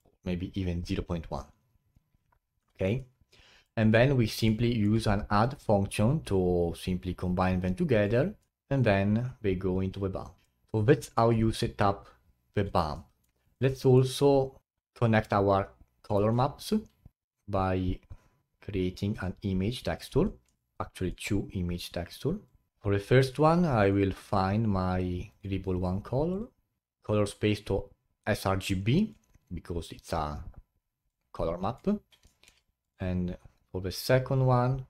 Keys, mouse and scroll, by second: 3.6-5.5 middle drag, 5.5 click, 8.0 click, 8.4-13.4 middle drag, 13.4 click, 13.7-14.5 middle drag, 14.5 scroll up 4, 14.6-16.1 middle drag, 16.1 shift+a, 20.4-22.7 middle drag, 22.7-24.2 drag, 26.8-30.3 middle drag, 30.3 click, 31.0-32.2 drag, 32.2 middle click, 32.8-34.8 drag.